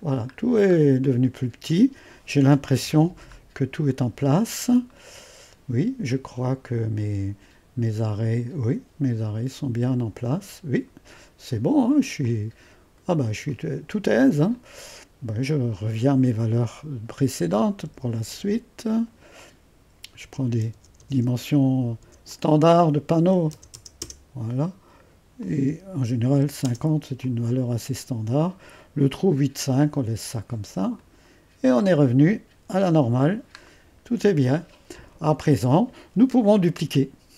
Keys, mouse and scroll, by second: 1.0-2.8 drag, 2.8 1, 3.2-4.5 scroll up 1, 3.9-5.0 drag, 4.8-5.5 typing, 11.4-12.2 scroll down 1, 12.2-14.3 drag, 14.5-17.8 drag, 17.8-18.2 typing, 19.3 click, 20.0-24.5 typing, 22.3 click, 24.6-26.2 drag, 26.3 typing, 27.2-30.3 drag, 30.9 click, 31.6-32.5 scroll down 1, 32.7 1.